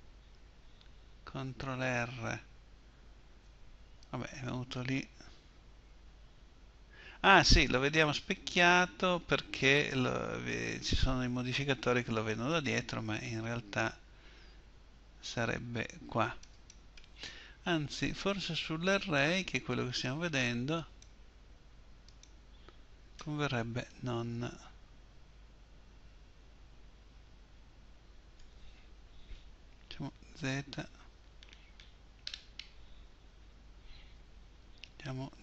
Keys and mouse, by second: 1.5 ctrl+r, 20.7-26.0 middle drag, 30.3 z, 33.0 z, 34.8 KP_1.